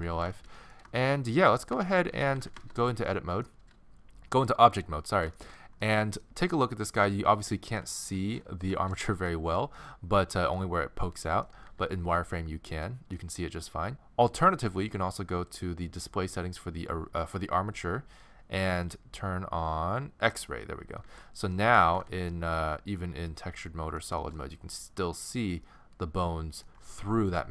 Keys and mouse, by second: 1.8 Tab, 2.1 z, 7.5-11.3 middle drag, 11.7 z, 17.4-19.1 middle drag, 20.4 middle click, 21.0 click, 21.0 z, 22.0 alt+z, 22.4 middle click.